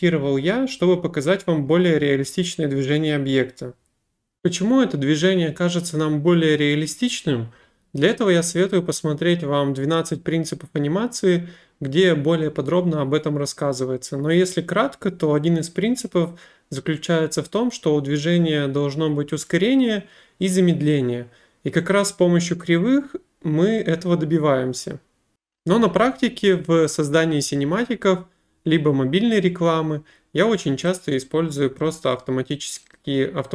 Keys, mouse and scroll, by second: 4.0 click, 25.0 click, 31.8 click, 33.0 right click.